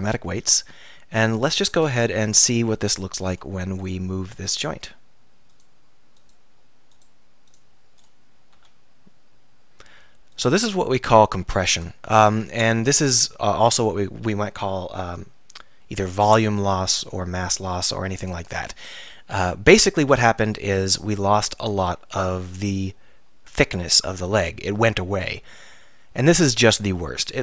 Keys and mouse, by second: 0.2-1.4 middle drag, 2.1 KP_3, 8.6 r, 9.8-10.4 middle drag, 10.8-12.2 drag, 20.9 r.